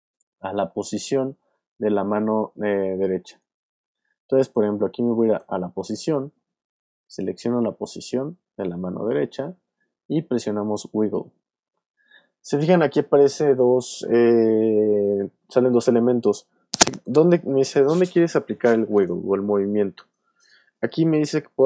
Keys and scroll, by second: 5.4 p.